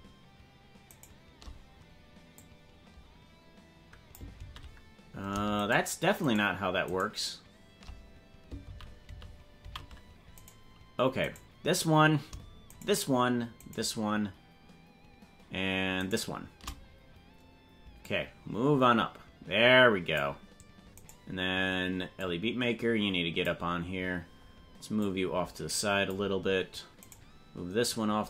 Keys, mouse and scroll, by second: 1.0 shift+right click, 2.3-4.2 drag, 4.5 ctrl+z, 5.6 shift+right click, 6.3 shift+right click, 6.9 shift+right click, 8.8 ctrl+z, 9.3 ctrl+z, 9.7 ctrl+z, 10.4 right click, 11.2 right click, 12.7 shift+right click, 13.7 shift+right click, 16.0 shift+right click, 18.0-20.3 drag, 21.0 right click, 22.2-23.4 drag, 24.9-26.1 drag, 27.1 right click.